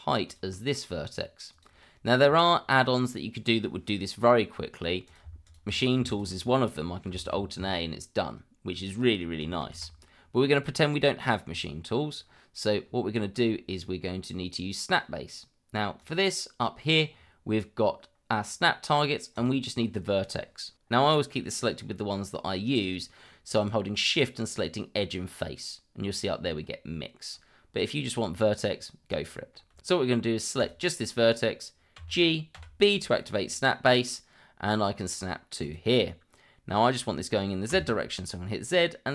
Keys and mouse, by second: 0.2 shift+click, 1.5 click, 5.0 click, 5.4 shift+click, 6.1 shift+click, 7.3 alt+a, 9.6 ctrl+z, 16.0-26.6 drag, 29.2 shift+middle click, 32.0 g, 32.5 b, 35.6 click, 37.7 z.